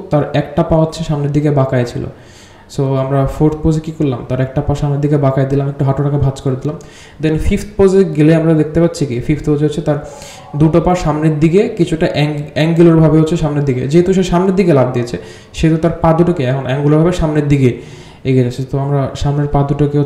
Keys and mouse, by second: 1.5 g, 2.8 g, 5.4 click, 5.5 g, 6.7 r, 7.1 g, 8.4 g, 9.1-15.1 drag, 15.4 click, 15.9 click, 16.2 click, 16.6 g, 17.6-18.9 drag, 19.2 g.